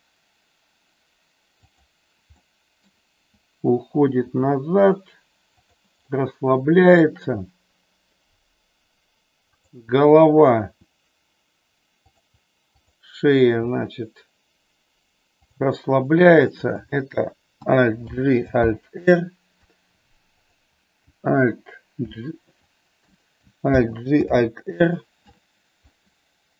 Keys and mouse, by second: 2.3 middle click, 4.2 r, 5.4 click, 6.1 middle click, 9.6 click, 10.7 r, 12.7 click, 13.6 r, 15.4 click, 16.2 click, 18.0 alt+g, 18.6 alt+r, 21.8 alt+f, 23.0 BackSpace, 23.7 alt+g, 24.2 alt+r.